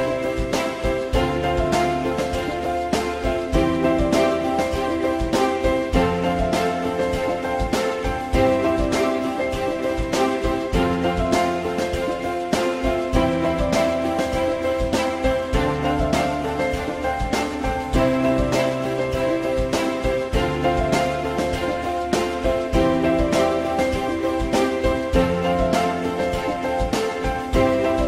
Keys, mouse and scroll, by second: 1.3 F4, 3.7 alt+x, 6.5 ctrl+click, 6.9 ctrl+click, 23.6 click.